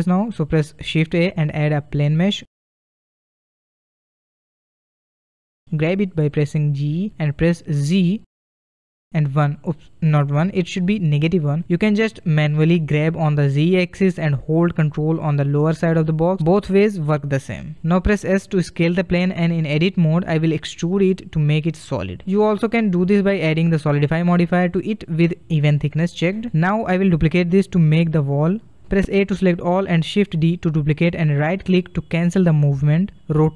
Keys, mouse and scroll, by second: 0.6 shift+a, 3.6-6.7 middle drag, 6.7 g, 16.6-17.2 scroll down 3, 17.2-18.1 middle drag, 18.1 s, 20.0-21.0 middle drag, 21.0-23.0 drag, 23.0 middle click, 23.3 e, 25.8-28.3 middle drag, 28.3 a, 28.5 a, 28.9 a, 29.4 middle click, 30.5 shift+d, 31.8-33.1 middle drag, 33.1 r.